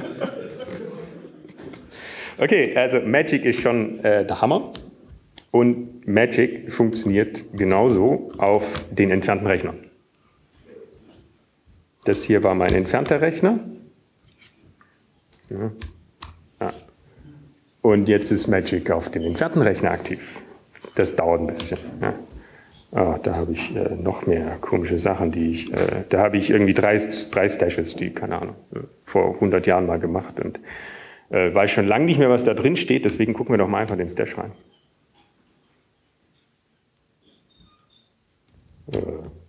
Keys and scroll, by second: 8.5 q, 10.8 alt+`, 11.3 Up, 14.0 Up, 15.3 Up, 16.7 Up, 16.7 Down, 19.3 Up, 19.3 Down, 20.6 Return, 21.6 ctrl+F12, 21.6 typing, 26.4 Up, 27.3 Up, 27.4 Up, 27.8 Up, 28.5-29.3 typing, 35.1 typing, 37.6 typing.